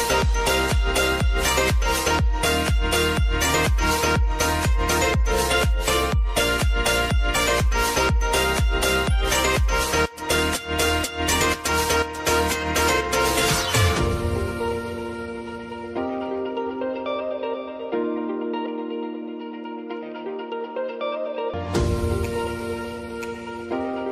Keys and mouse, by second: 0.7 space, 3.0 click, 4.1 r, 5.0 click, 5.6 u, 6.8 k, 9.2-10.1 typing, 9.5 click, 10.7 Return, 12.1 k, 13.5 click, 18.7 Return, 19.9 k, 21.1 click, 21.8 -, 22.3 Return, 23.2 k.